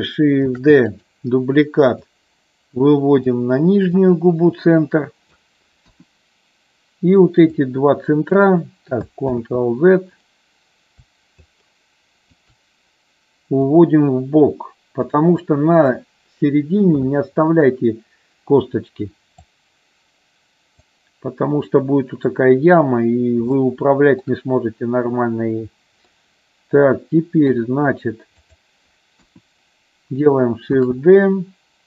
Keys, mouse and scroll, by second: 0.4 shift+d, 0.9 click, 1.9-3.3 drag, 4.0-5.3 drag, 5.8 KP_1, 7.6 shift+click, 9.3 ctrl+z, 11.4 shift+click, 13.7-15.1 drag, 19.5-20.7 drag, 23.6 shift+middle click, 26.1-27.4 middle drag, 28.3 click, 29.2 KP_1, 30.7 shift+d.